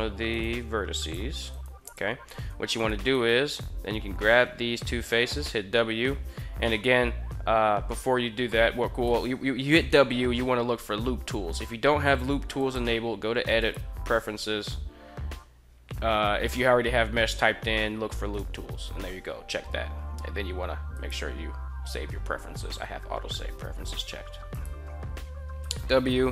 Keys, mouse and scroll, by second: 0.0 right click, 0.5 g, 0.8 click, 1.2 right click, 1.7 click, 1.7 g, 2.3 3, 2.5 right click, 2.9 shift+right click, 5.2 w, 8.9 w, 12.5-13.6 drag, 25.3 w.